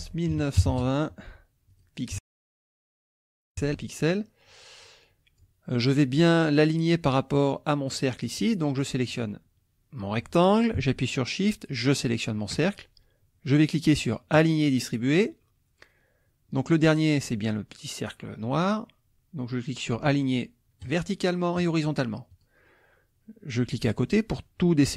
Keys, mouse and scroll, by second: 0.3 KP_9, 0.6 KP_2, 0.7 KP_0, 1.7 click, 2.2 ctrl+a, 3.1 KP_0, 3.6 KP_Enter, 4.8 click, 7.9 click, 8.8 click, 9.1 click, 11.7 shift+click, 14.4 click, 20.8 click, 21.6 click, 22.3 click.